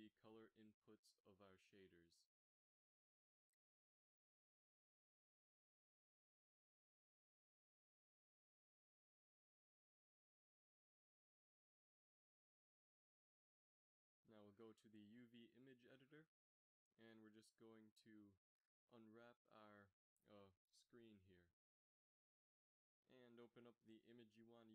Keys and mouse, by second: 0.3 f, 0.8 f, 3.2 f, 5.9 g, 7.5 drag, 13.7 click, 16.5 Tab, 18.2 u, 20.0 KP_1, 21.1 u.